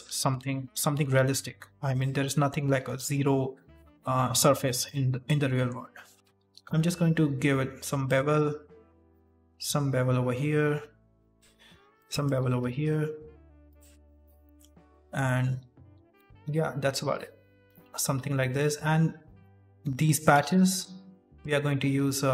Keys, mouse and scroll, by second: 0.0 middle click, 0.4-0.8 scroll up 2, 0.8 middle click, 1.1 g, 2.1 middle click, 2.9 shift+middle click, 4.8 middle click, 6.1 middle click, 6.1 alt+right click, 6.3 ctrl+b, 8.1 middle click, 9.0 alt+right click, 9.4 ctrl+b, 11.9 right click, 12.1 alt+right click, 12.6 ctrl+b, 13.9-14.3 scroll down 3, 14.2 middle click, 15.1 right click, 15.6 alt+right click, 16.3 s, 17.6 right click, 17.7 right click, 17.7 shift+middle click, 17.8-18.2 scroll up 6, 18.3 middle click, 18.6 scroll down 2, 19.4 right click, 19.8 3, 20.0 right click, 20.6 Delete, 21.5 shift+middle click, 21.6 scroll up 2, 22.0 2.